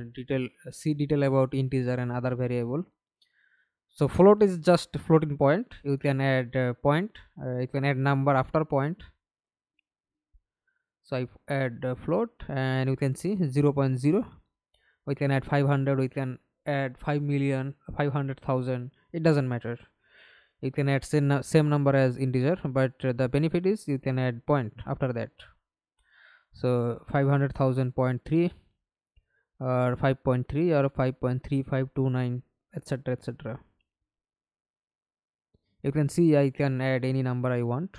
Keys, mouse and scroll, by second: 2.5 ctrl+alt+middle click, 3.6 ctrl+alt+middle click, 14.6-15.7 typing, 17.3-19.0 typing, 19.0 Return, 20.4 Right, 21.2 Left, 22.1 Right, 22.8-24.5 typing, 24.6 Return, 25.7 Right, 26.6 BackSpace, 28.0 Return, 28.7 Left, 29.1-29.7 Right, 30.4-31.1 BackSpace, 32.5 1, 32.6 1, 33.1-33.9 Right, 34.1-35.9 typing, 35.9 Return, 36.7 Right, 37.3-37.9 typing.